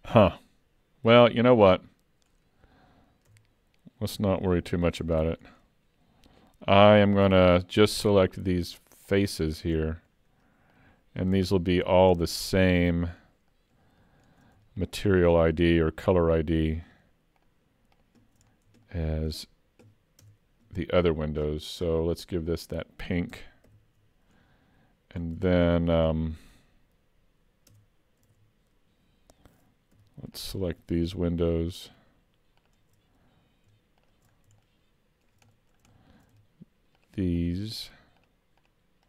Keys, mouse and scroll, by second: 1.1 l, 3.3 Tab, 4.6 alt+a, 7.3 3, 7.6 click, 8.6 shift+click, 9.5-9.8 scroll down 4, 9.8 shift+middle click, 10.7 shift+click, 12.2-12.8 scroll down 5, 12.9 shift+middle click, 14.8 shift+click, 18.5 scroll down 3, 18.9 shift+middle click, 20.3 Tab, 21.5-22.5 scroll down 17, 22.5 click, 23.7 shift+k, 25.2-25.6 scroll up 6, 25.7-26.2 scroll down 2, 26.2 shift+middle click, 27.7 Tab, 28.3 alt+a, 30.0 3, 30.4 click, 31.0 shift+click, 34.3 scroll up 4, 34.7 shift+middle click, 35.5 middle click, 36.0 shift+middle click, 37.0 shift+click.